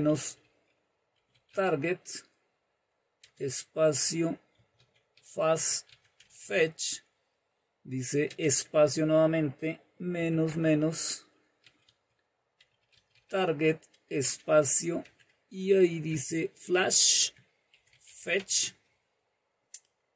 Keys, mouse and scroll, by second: 0.0-1.7 typing, 3.2-6.9 typing, 8.2 space, 10.2 typing, 11.5-14.9 typing, 16.0-18.7 typing.